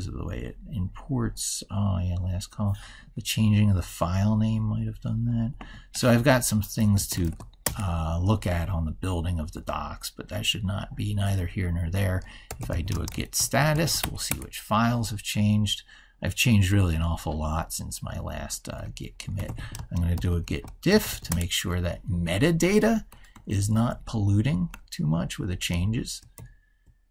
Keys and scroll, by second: 23.7 ctrl+f.